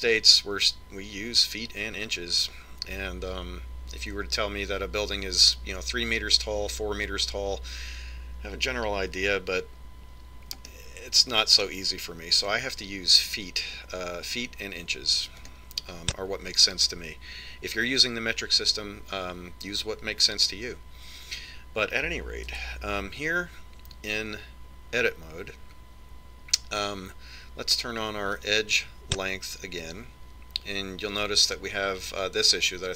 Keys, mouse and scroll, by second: 0.3-2.1 middle drag, 11.3-13.1 middle drag, 16.0 click, 23.1 Tab, 29.1 click.